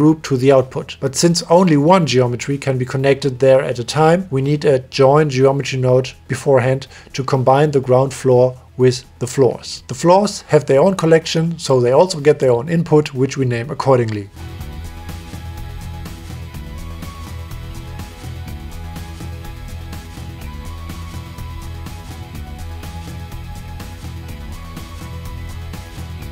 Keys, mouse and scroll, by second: 1.2 right click, 4.6 shift+a, 7.3 right click, 8.9 middle click, 10.7 right click, 12.3 ctrl+click, 13.7 click, 14.5 click, 15.0 n, 15.8-17.7 right drag, 16.6 o, 17.0 l, 17.9 middle click, 19.0 right click, 19.4 Tab, 19.7 middle click, 20.3 right click, 20.9-23.0 right drag, 21.6 o, 22.0 l, 23.0 middle click, 23.8 click, 24.4 drag.